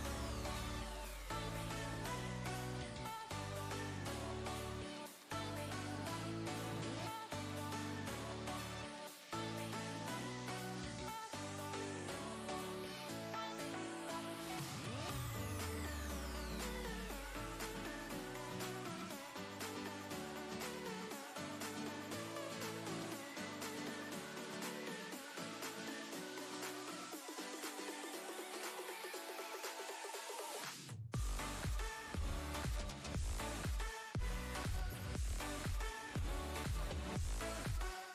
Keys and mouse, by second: 2.0-5.7 drag, 13.1 right click, 14.2 click, 15.3 click, 20.6 click, 28.3 click, 37.4 click.